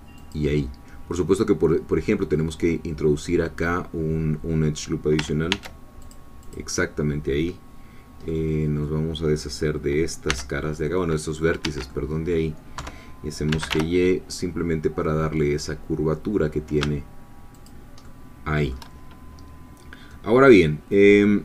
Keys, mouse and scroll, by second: 0.2-5.2 drag, 5.5 ctrl+r, 6.0 ctrl+click, 8.3 middle click, 10.3 c, 10.7-12.8 middle drag, 11.6 Escape, 12.8 3, 13.5 g, 13.7 y, 17.6 shift+click, 18.0 shift+click, 19.7 scroll down 2, 20.1-21.4 drag.